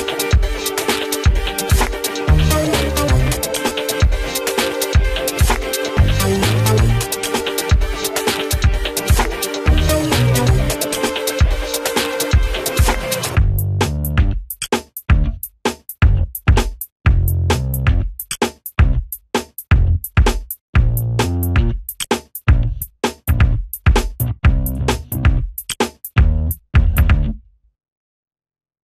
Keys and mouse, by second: 0.6 ctrl+z, 1.0 ctrl+space, 4.5 z, 5.0 shift+Page_Down, 6.1 click, 6.6 Delete, 6.8 click, 7.6 shift+Page_Down, 10.0 click, 19.1 right click, 19.9-23.4 drag, 23.4 ctrl+space, 23.6 click, 27.3 click.